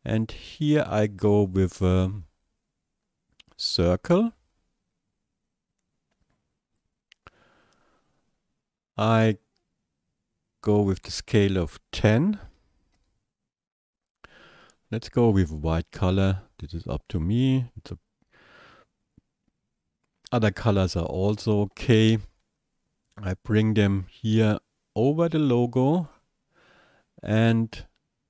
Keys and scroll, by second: 12.4 KP_1, 12.6 KP_0, 12.9 Return.